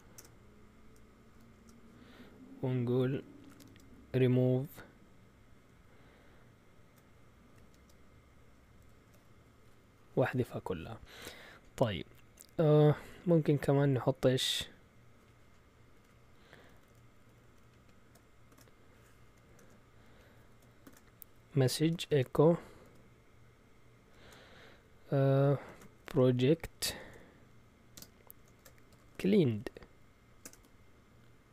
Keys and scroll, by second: 0.0-1.5 typing, 1.5 Return, 3.1-3.9 typing, 7.3-9.0 typing, 8.8 Escape, 13.1 a, 15.9 Home, 16.5 Right, 16.7 Right, 16.9 Right, 17.3 Right, 17.4 Left, 17.6 Left, 17.7 Left, 18.5 shift+2, 19.2 End, 19.6 typing, 20.8-22.5 typing, 24.0 typing, 25.6-31.0 typing.